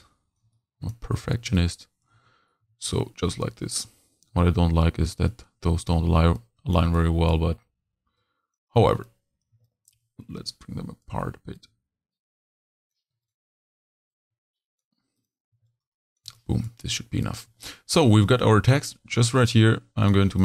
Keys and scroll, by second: 2.3 h, 2.6 v, 2.8 a, 6.2 z, 6.8 h, 8.7-11.0 typing, 15.5 shift+z, 16.0 shift+z, 17.4 z, 18.1 v.